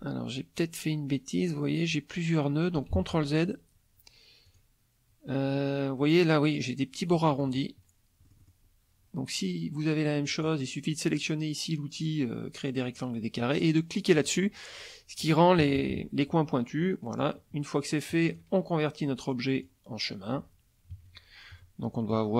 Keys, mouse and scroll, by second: 2.9 ctrl+z, 4.4 click, 7.1 middle click, 8.2 middle click, 10.3 click, 14.1 click, 15.6 KP_Subtract, 16.6 middle click, 18.3 click, 19.6 click, 20.9 KP_Subtract, 21.8 middle click.